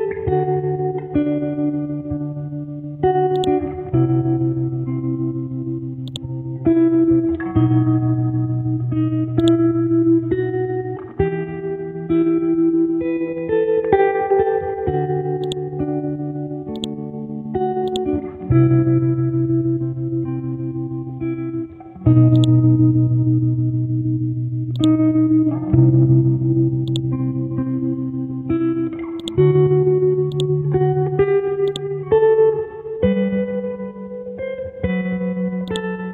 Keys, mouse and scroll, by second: 12.2 Right, 12.4 Right, 12.9 Right, 15.4-19.3 drag, 19.3 click, 21.7 scroll down 1, 22.3 click, 22.8 scroll up 1, 24.8 click, 25.1 scroll down 1, 26.9 click, 28.1 scroll up 1, 29.2-31.4 drag, 32.7 click, 32.9 F12, 33.1 Tab, 33.4 KP_2, 33.7 Tab, 35.7 click.